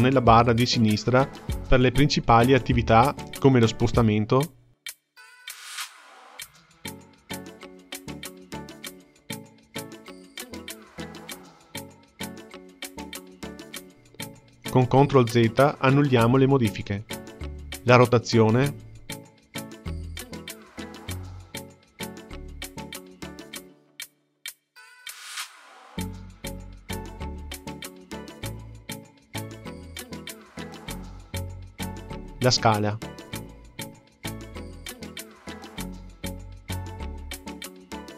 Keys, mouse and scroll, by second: 0.3 click, 3.5-5.9 drag, 8.8 click, 12.5 click, 15.5 ctrl+z, 15.9 ctrl+z, 16.3 ctrl+z, 18.5-21.4 drag, 24.6 click, 27.1 click, 30.1 ctrl+z, 30.4 ctrl+z, 30.7 ctrl+z, 32.9-35.4 drag, 37.4 click.